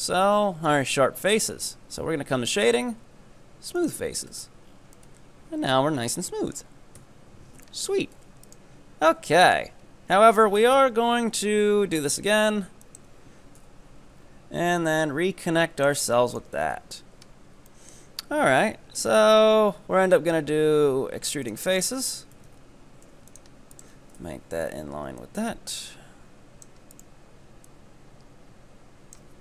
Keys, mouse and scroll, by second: 1.3-4.3 drag, 4.4 Tab, 4.7 scroll down 6, 5.0-7.0 middle drag, 7.0 KP_3, 7.7-8.2 shift+middle drag, 8.2 Tab, 8.5 right click, 9.3-11.2 shift+middle drag, 11.2 e, 13.6 KP_7, 14.2 scroll up 2, 14.8-16.4 drag, 16.4 ctrl+right click, 16.7 KP_3, 17.8-19.0 shift+middle drag, 19.0 e, 21.7 right click, 22.4 g, 23.8 ctrl+right click, 24.2 KP_7, 25.2-27.0 drag, 27.0 right click, 27.7-29.4 drag.